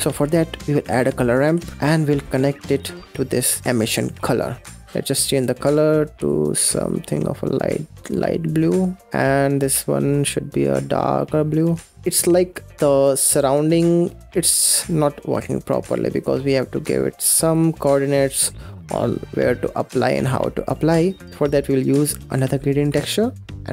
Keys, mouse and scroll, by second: 0.0 shift+a, 3.0 click, 4.5 middle click, 4.8 click, 9.0 click, 12.0-12.6 scroll up 10, 12.6-14.3 drag, 14.3-14.9 scroll down 6, 15.1-17.5 drag, 17.5-18.0 scroll down 5, 18.0-18.6 middle drag, 18.6-18.9 scroll up 3, 18.9 middle click, 19.2 scroll down 3, 19.7 middle click, 20.5 scroll down 2, 21.0 scroll up 4, 21.3 click, 22.1 shift+d, 23.0-23.3 scroll up 4, 23.3-23.7 middle drag.